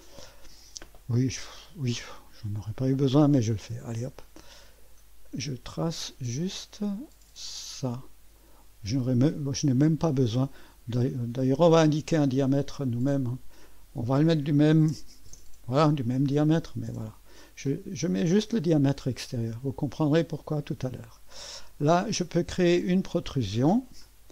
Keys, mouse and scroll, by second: 3.8 click, 4.3 click, 5.7 click, 8.3 click, 10.4 right click, 11.6 click, 13.1 click, 14.4-15.4 typing, 20.0 click, 23.9 click.